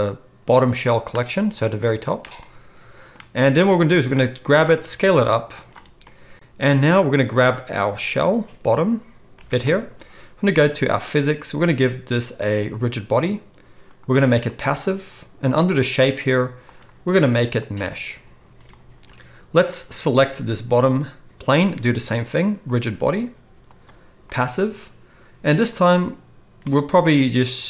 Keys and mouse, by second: 1.1-4.0 middle drag, 4.0-4.5 drag, 4.5 middle click, 4.5 s, 7.3 click, 9.3 g, 10.9 click, 11.0-12.6 middle drag, 12.6-19.8 drag, 19.8-22.7 middle drag, 22.7-27.6 drag.